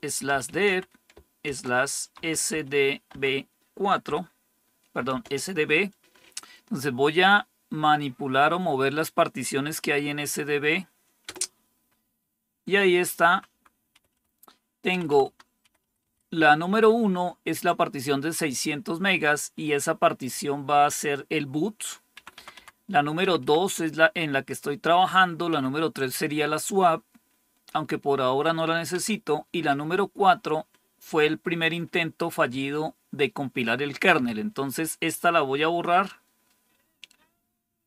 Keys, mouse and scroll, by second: 0.0-4.0 typing, 5.0 typing, 11.2 Return, 13.2 Down, 13.4 Down, 13.8 Up, 14.0 Up, 14.8 Down, 15.0 Down, 15.1 Down, 15.5 Up, 15.7 Up, 15.9 Up, 22.1 Down, 22.3 Down, 22.5 Down, 23.1 Up, 23.3 Up, 25.4 Down, 28.8 Down.